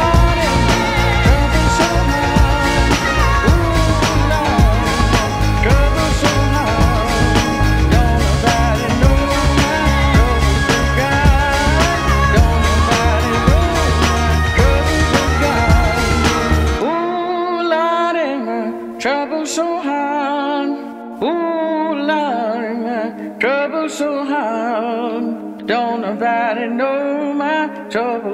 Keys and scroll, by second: 0.0-0.5 typing, 1.0 Return, 2.1 5, 8.9 z, 17.5 q.